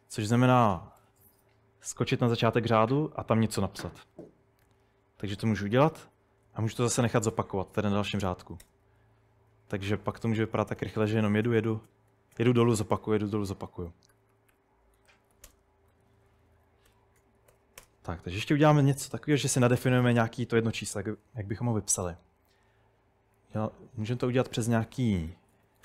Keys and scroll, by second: 1.1 typing, 3.1 typing, 4.6 Escape, 5.9-12.4 typing, 14.2-17.8 typing, 24.2-25.8 typing.